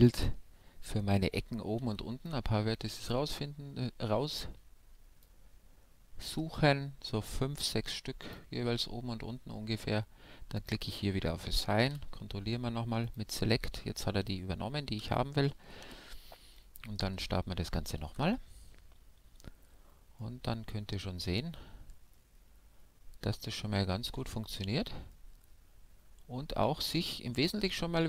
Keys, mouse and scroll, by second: 1.8 b, 6.3 b, 10.6-12.5 drag, 11.2-13.0 middle drag, 11.8 a, 13.0-15.0 drag, 13.8 a, 15.0 Tab, 15.8 KP_5, 16.5-19.2 middle drag, 18.0 alt+a, 20.4-22.1 middle drag, 25.4-27.1 middle drag, 27.6-28.0 scroll up 1.